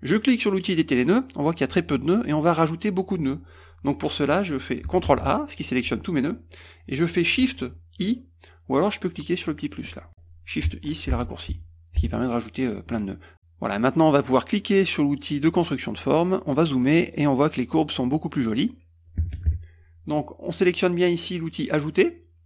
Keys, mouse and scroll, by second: 0.6 click, 5.1 ctrl+a, 9.8 click, 11.1 shift+i, 11.5 shift+i, 12.0 shift+i, 15.8 click, 16.5 middle click, 16.5-16.9 scroll up 4, 16.8 middle click, 16.9 middle click, 17.2 middle click.